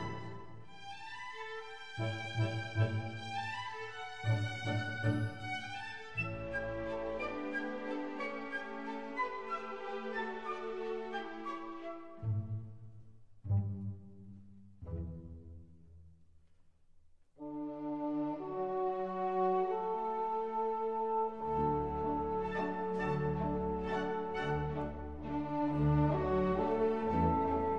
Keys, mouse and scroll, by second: 1.3 d, 7.9 ctrl+z, 9.0 ctrl+z, 10.6-12.4 drag, 12.1 shift+d, 14.0-16.1 drag, 15.7 p, 17.5 Tab, 18.3-20.5 drag, 18.7 Tab, 20.5 ctrl+r, 24.3 ctrl+z, 25.6 ctrl+r.